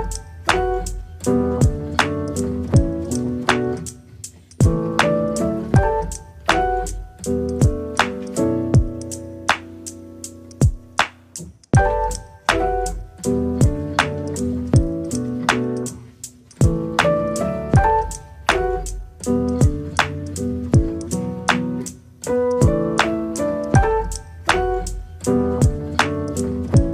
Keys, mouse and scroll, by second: 6.9 click, 7.6 click, 8.0 click, 8.9 t, 9.9 click, 11.2 click, 13.1 click, 14.7 KP_0, 15.1-15.6 scroll up 4, 15.6-16.7 shift+middle drag, 16.7 click, 17.3 click, 18.1 click, 18.7 click, 22.1 click, 23.4 scroll down 2, 23.5 middle click, 23.9 scroll down 2, 24.2 middle click, 24.4 click, 25.1-25.9 scroll down 6, 25.9 click, 26.6-26.9 drag.